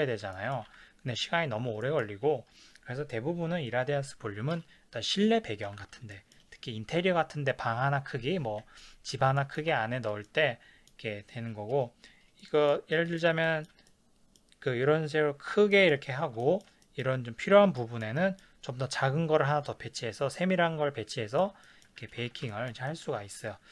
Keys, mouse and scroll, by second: 0.7 ctrl+s, 1.8 shift+middle click, 5.7 ctrl+s, 6.1 shift+middle click, 9.8 ctrl+s, 10.2 middle click, 10.8-18.2 middle drag, 22.2 ctrl+s, 23.0-23.7 middle drag.